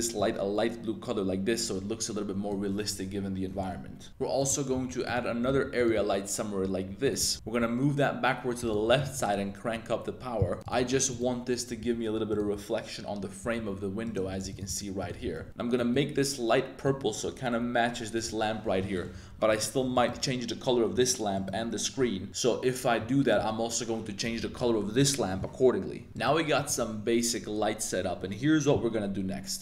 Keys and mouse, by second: 3.5-5.5 typing, 4.4 right drag, 7.0 click, 7.0 r, 7.2 g, 7.3 z, 7.6 z, 8.8 g, 9.8 click, 10.6 r, 10.8 shift+s, 11.8 g, 13.4-15.4 typing, 14.0 drag, 19.5 right click, 21.3 right click, 26.1 super+s, 26.6 right click.